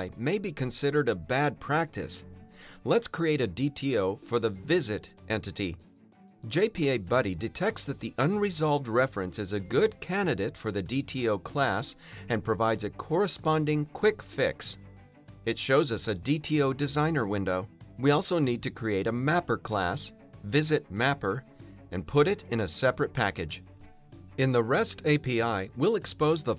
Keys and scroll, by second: 0.6 Return, 3.9 alt+Return, 15.1 alt+BackSpace, 21.6 Return.